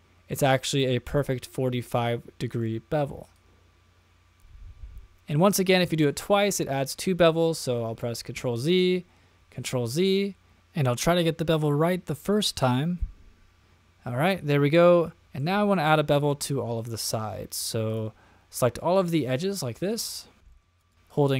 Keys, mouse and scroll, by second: 1.8-2.6 middle drag, 3.3-5.8 drag, 8.3 super+z, 9.6 super+z, 10.8-12.6 drag, 12.9-15.2 middle drag, 15.2 click, 15.4-15.9 middle drag, 16.4 click, 17.0 click, 17.9 shift+click, 18.9 shift+click, 19.4-20.0 middle drag, 20.2 shift+middle click, 20.5 middle click, 20.8 shift+click, 20.9 shift+click, 21.1 shift+click.